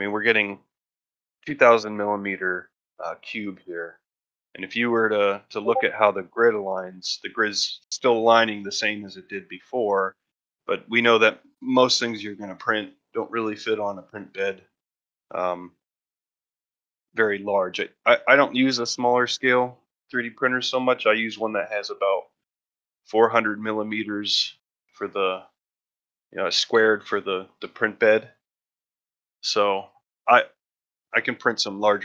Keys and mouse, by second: 6.6-7.2 ctrl+middle drag, 9.2 ctrl+middle drag, 9.8 shift+middle drag.